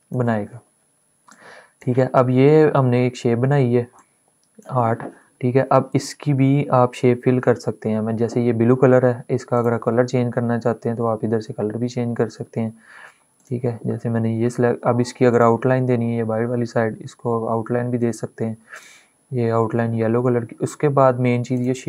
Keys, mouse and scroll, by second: 1.1-3.6 drag, 3.6-9.2 shift+drag, 13.2 click, 18.6 click, 21.3 click.